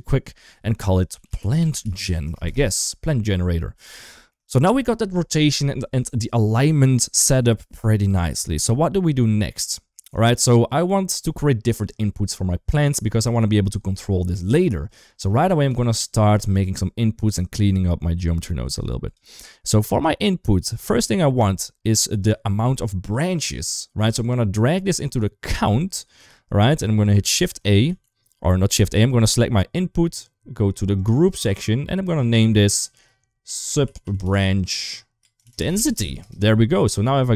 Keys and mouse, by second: 3.9 shift+middle click, 10.0-10.7 drag, 12.1 middle click, 13.1 click, 14.7 click, 15.1 click, 15.5 g, 17.0 click, 17.3-18.7 drag, 20.7 middle click, 22.0 click, 22.3-25.3 drag, 27.7 shift+a, 28.8 click, 30.8 click, 31.9 click, 32.2-36.0 drag, 34.0 b.